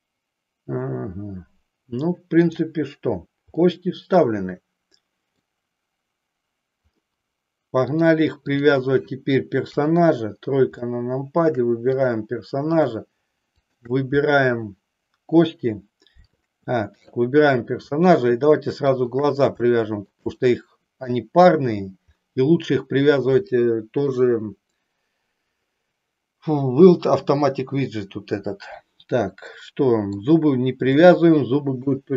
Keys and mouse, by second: 2.4 click, 3.6-5.5 middle drag, 7.9 click, 9.7 KP_3, 10.8 shift+middle click, 11.9 click, 13.5 shift+click, 16.9 click, 19.0 shift+click, 19.8 shift+middle click, 20.4 middle click, 29.5 middle click, 30.9-31.9 shift+middle drag.